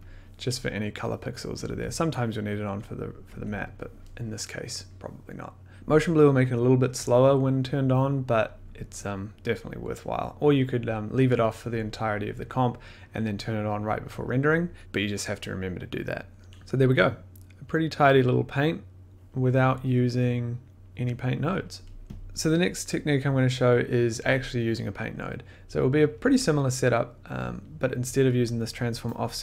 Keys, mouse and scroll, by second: 0.0 click, 1.6 click, 1.7 1, 2.8 click, 3.3 1, 4.7 click, 21.1 middle click, 21.5 scroll, 22.0 click, 22.1 click, 22.2 middle click, 22.4 middle click, 23.3 middle click, 26.9 middle click, 27.5 click, 28.6-29.3 scroll, 29.3 click.